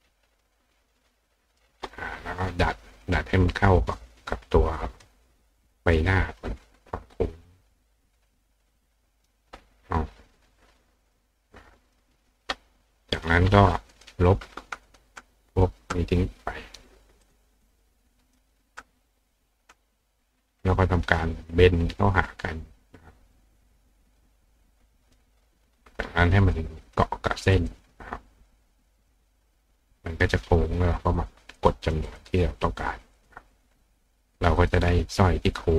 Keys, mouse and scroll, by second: 0.2-1.6 drag, 3.0 click, 4.9 click, 5.8 click, 7.2 click, 8.3 click, 11.3 click, 13.2 click, 13.9 click, 14.9 click, 15.6 click, 17.2 click, 18.3 click, 19.2 click, 21.8-23.4 drag, 24.2-25.2 drag, 26.9 click, 27.6 click, 29.0 click, 31.2 click, 31.6 click, 31.8 click, 32.1 click, 32.3 click, 33.2 click, 34.6 click.